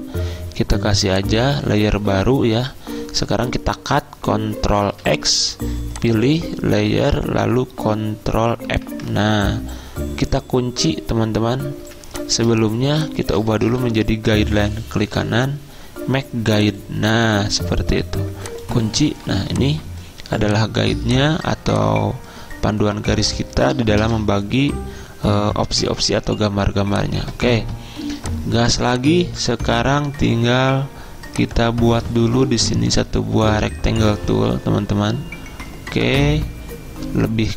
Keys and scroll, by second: 4.9 ctrl+x, 8.7 ctrl+f, 11.9 z, 13.7 v, 19.3 z, 24.1 v, 28.1 z, 31.0 z.